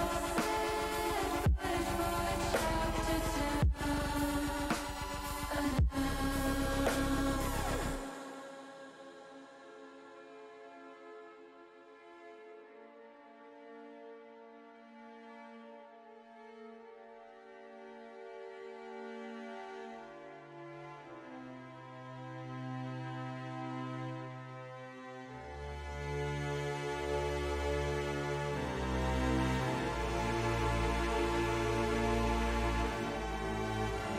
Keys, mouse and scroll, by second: 0.2 ctrl+r, 4.0 click, 5.3 s, 6.1 click, 6.3 ctrl+z, 7.6 click, 8.8-11.9 drag, 13.7 ctrl+z, 15.6 middle click, 16.3 shift+middle click, 16.8-18.3 middle drag, 18.5-20.7 middle drag, 21.5 middle click, 25.6 s, 27.6 click, 27.6 y, 28.2 ctrl+z, 30.3 l, 31.8 s, 33.0 y.